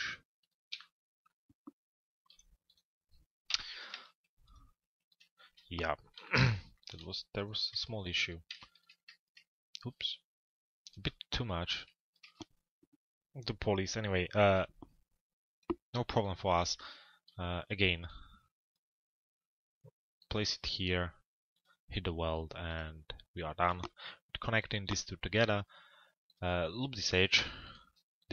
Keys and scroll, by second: 3.1 Delete, 27.0 BackSpace.